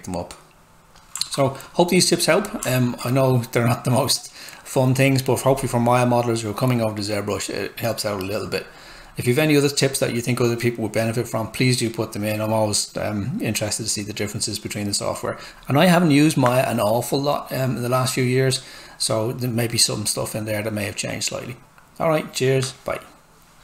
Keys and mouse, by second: 0.1 click, 0.7-1.1 typing, 1.2 alt+right click, 5.5 typing.